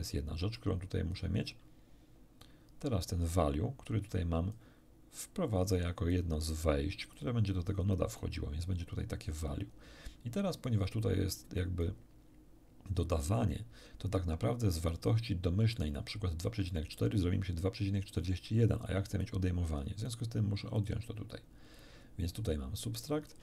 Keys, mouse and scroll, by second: 2.4-4.7 drag, 5.5-6.3 drag, 7.1-8.4 drag, 10.6-12.0 drag, 18.7 click, 19.2-19.9 drag, 20.1 click, 20.7 click, 21.7 click, 22.5-23.4 drag.